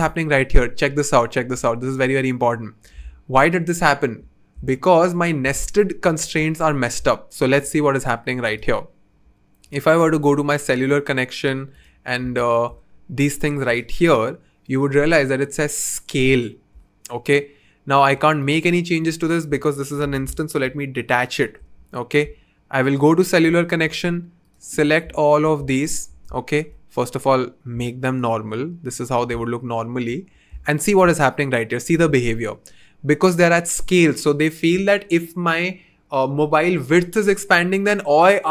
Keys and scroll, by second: 20.6 alt+super+b.